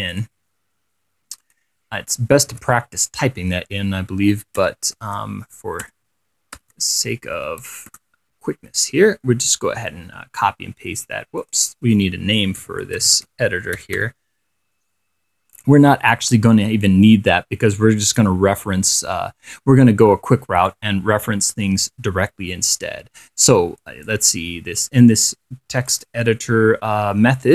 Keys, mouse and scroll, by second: 0.4 click, 1.6 click, 2.7 ctrl+v, 4.8 Return, 5.2 shift+[, 6.1 Return, 6.8-8.1 typing, 8.1 Return, 9.9 scroll down 2, 11.6 click, 12.6-14.7 typing, 15.8 click, 18.3-19.1 scroll up 1, 19.3 middle click, 20.9-24.5 drag, 26.1 click, 27.0 scroll down 2.